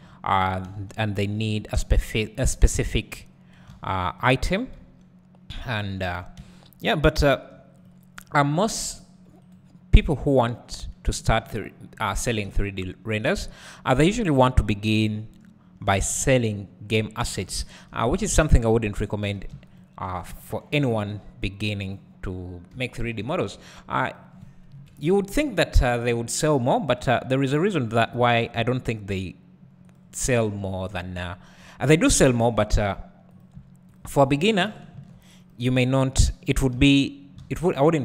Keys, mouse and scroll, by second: 0.0 ctrl+click, 0.7 g, 1.9 click, 3.7 alt+a, 4.2 click, 4.8 g, 5.9 click, 6.2 Tab, 6.4 `, 7.9 click, 10.5-18.4 right drag, 12.2-12.5 scroll down 1, 12.5 `, 17.4 alt+a, 17.6 `, 18.4 click, 19.3 w, 19.8 shift+click, 22.9 `, 24.2 click, 24.8 KP_Decimal, 25.7 scroll down 1, 28.3 alt+s, 30.0 click, 30.3-30.6 scroll down 1, 31.4-33.4 scroll up 1, 33.4 click, 34.0 shift+click, 35.9-36.6 scroll down 1, 36.8 ctrl+z, 37.4 alt+a.